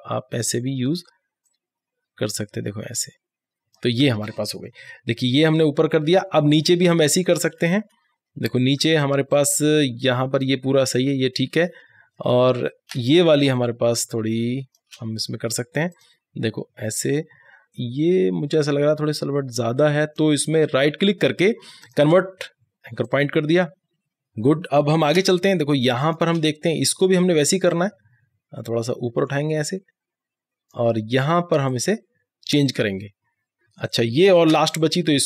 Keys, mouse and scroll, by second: 4.9 alt+scroll down 1, 6.9 alt+scroll up 1, 9.4-11.7 drag, 11.7 scroll down 1, 13.1 click, 13.5 space, 14.9 click, 15.5 click, 16.0 click, 17.0 alt+scroll up 1, 17.2 click, 20.5 right click, 21.9 click, 24.3 scroll down 1, 24.9 click, 25.1 space, 25.7-30.6 drag, 30.9 right click, 31.3-33.6 drag, 33.6 scroll down 1, 34.1 space, 34.1 click, 34.3 space, 34.9-35.2 drag.